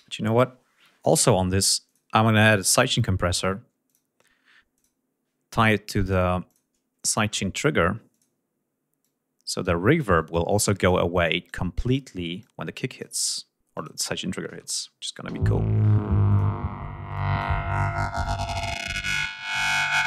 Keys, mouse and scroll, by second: 1.9 click, 3.9 click, 4.8 click, 5.6 click, 6.1 click, 6.5 click, 8.2 click, 9.1 click, 10.2 click, 11.5 click, 12.5 click, 13.8 click, 15.4 l, 16.4 click, 17.2 click, 18.3 click, 19.5 click.